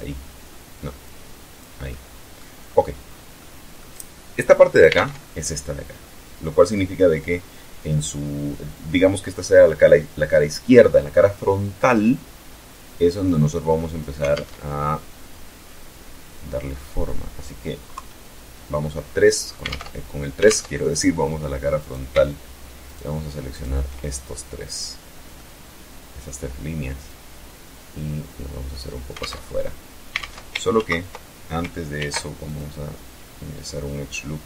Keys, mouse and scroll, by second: 0.4 click, 1.2 middle click, 2.1 scroll up 2, 2.4 scroll down 2, 2.8 middle click, 4.3 alt+Tab, 13.7 alt+Tab, 14.1-16.1 alt+drag, 17.3 KP_3, 19.0 alt+Tab, 19.8 alt+Tab, 21.1 right click, 22.2 shift+right click, 22.8 shift+right click, 24.7-25.8 middle drag, 26.4-28.3 drag, 28.5 alt+Tab, 29.8 ctrl+alt+Tab, 30.1 ctrl+alt+z, 31.3 ctrl+r, 31.8 ctrl+click, 34.1 click.